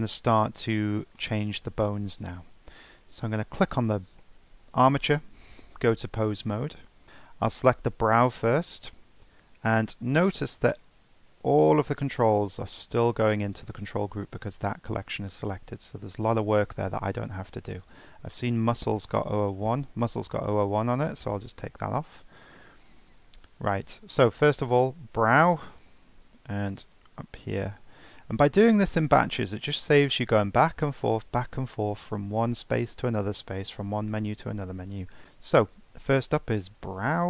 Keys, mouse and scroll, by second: 0.0 click, 0.7-1.2 middle drag, 1.5 alt+middle click, 2.0-2.4 scroll up 2, 2.4-3.6 shift+middle drag, 3.6 click, 5.5 ctrl+Tab, 6.4-6.7 scroll up 1, 6.8 shift+middle click, 7.0 click, 10.8-13.9 drag, 17.8 click, 18.0-19.2 drag, 19.2 BackSpace, 19.5 BackSpace, 24.5 click, 26.9-28.2 drag, 28.2-29.1 scroll down 4, 29.1-29.6 scroll down 3, 29.6-30.3 scroll up 2.